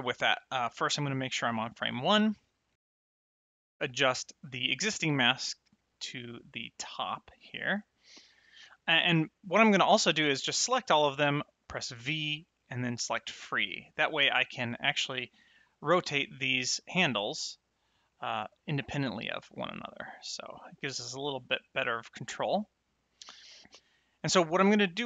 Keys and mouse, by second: 1.3 shift+Left, 2.7 click, 4.4 click, 5.8 click, 8.1 click, 9.4 click, 11.8 v, 12.9 click, 14.2 click, 15.4 click, 16.5 click, 17.7 click, 19.4 click, 22.4 click, 24.1 click.